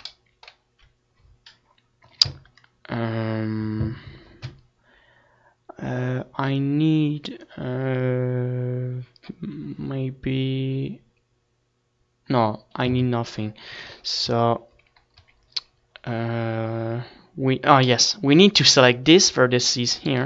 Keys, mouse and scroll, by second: 0.4 ctrl+s, 0.7 z, 1.1 c, 2.1-3.4 drag, 2.9 ctrl+s, 6.3 a, 7.0 c, 8.3-9.8 right drag, 8.4-9.8 drag, 9.3 a, 10.0 c, 10.1 click, 10.5 right click, 11.6 z, 12.0 ctrl+s, 12.3 Tab, 12.6 click, 12.6 ctrl+s, 14.0 ctrl+s, 16.4 z, 18.2 middle click.